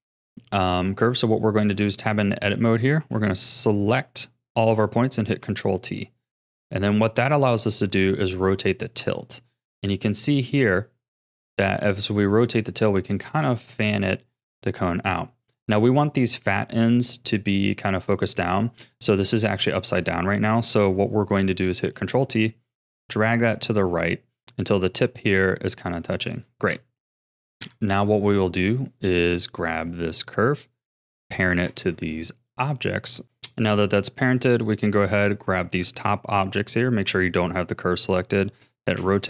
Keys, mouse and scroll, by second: 0.3-1.7 scroll up 3, 1.7 Tab, 2.3 scroll down 2, 3.0 a, 3.4 a, 4.0-5.2 middle drag, 5.2 ctrl+t, 21.9 ctrl+t, 23.9-26.4 middle drag, 26.4 Tab, 27.6 KP_1, 28.7 click, 29.5 click, 30.0 click, 30.7 shift+click, 31.7 ctrl+p, 33.7 click, 36.7 click, 37.5 click, 39.0 r.